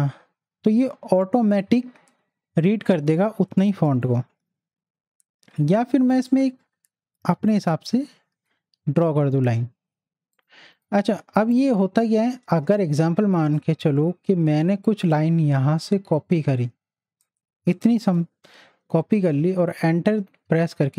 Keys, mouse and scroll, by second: 4.0 click, 4.4 ctrl+z, 6.3-10.4 drag, 11.1 z, 11.5 click, 12.0 space, 12.2 click, 12.5 space, 12.8-14.1 drag, 14.1 t, 15.1-18.1 drag, 18.1 ctrl+c, 18.9 Right, 19.8 Return.